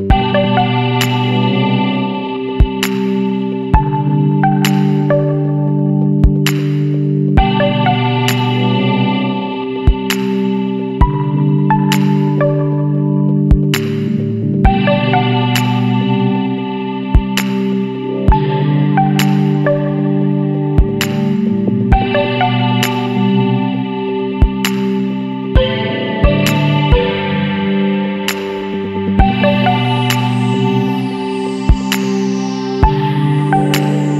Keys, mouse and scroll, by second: 1.5 middle drag, 1.7-2.0 scroll up 2, 2.0-2.5 scroll down 1, 2.5-2.8 shift+middle drag, 2.8-3.5 scroll up 1, 3.5-4.1 middle drag, 4.1 Tab, 9.6 scroll down 2, 9.7-10.2 middle drag, 10.2 click, 10.6 scroll down 2, 10.7-11.6 middle drag, 11.6 click, 12.9 ctrl+a, 14.8-15.1 middle drag, 15.1-16.1 scroll up 3, 16.1 click, 16.6 click, 18.5-19.5 drag, 21.7-23.1 drag, 23.1-23.4 scroll down 4, 23.6-25.6 middle drag, 25.6 click, 26.1-26.4 middle drag, 26.4-27.2 scroll up 2, 26.7 shift+middle drag, 27.2-27.6 middle drag, 27.6 alt+a, 27.8 middle drag, 28.0-28.5 scroll up 1, 28.5-29.5 middle drag, 29.5 click, 29.8 scroll down 2, 30.0-33.4 middle drag, 33.4 scroll down 1, 33.5-34.1 middle drag.